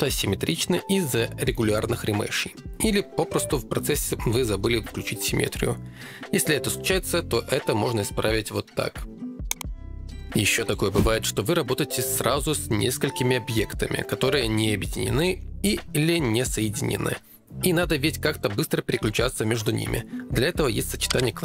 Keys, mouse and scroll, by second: 4.4 middle click, 5.5 ctrl+Tab, 6.1 ctrl+Tab, 7.4 click, 7.7-9.9 drag, 12.2 click, 14.0 click, 16.0 click, 17.3 ctrl+Tab, 18.9 2, 19.3 f, 21.2 alt+q.